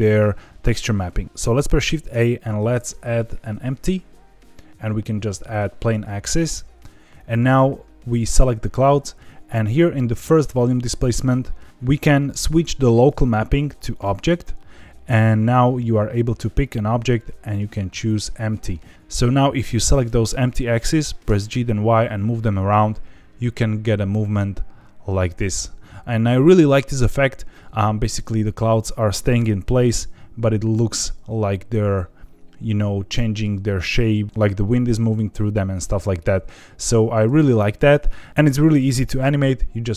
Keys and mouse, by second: 1.8 shift+a, 12.9-14.0 drag, 16.6-18.2 drag, 19.8 click, 21.2 g, 21.5 y, 28.1 click, 29.1 g, 29.4 y, 36.6 Escape, 38.0 ctrl+z.